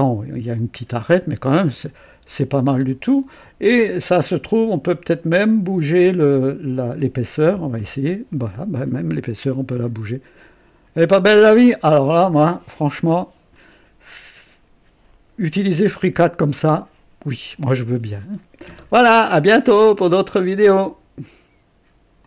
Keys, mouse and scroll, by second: 0.6-3.0 drag, 4.4 click, 5.5 click, 6.3 click, 7.5 KP_2, 7.7 KP_Enter, 8.7 click, 9.7-13.6 drag, 16.2-18.5 drag, 17.5 typing, 20.7 right click, 20.7 typing, 22.2 click.